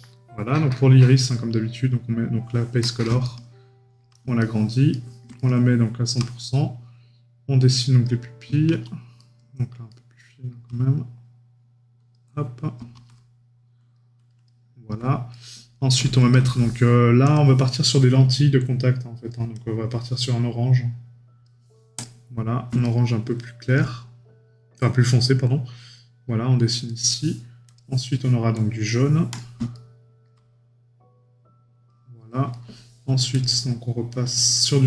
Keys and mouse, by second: 0.7 right click, 3.2 right click, 9.2 right click, 15.3 right click, 22.8 right click, 26.9 right click, 29.7 right click, 32.5 right click.